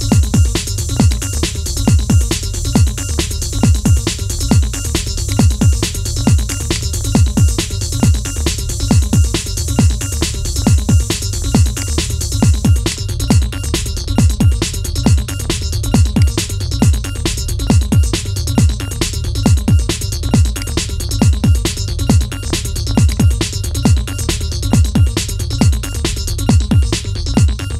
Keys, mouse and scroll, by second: 0.8 click, 2.9 scroll up 1, 5.0 click, 6.3-9.4 drag, 11.5 click, 15.9 click, 18.7 click, 19.2 scroll down 2, 19.7-20.3 scroll up 2, 20.3 click, 22.1 scroll down 3, 22.8 click, 24.4 KP_3, 25.4 click, 27.0-27.7 scroll up 1.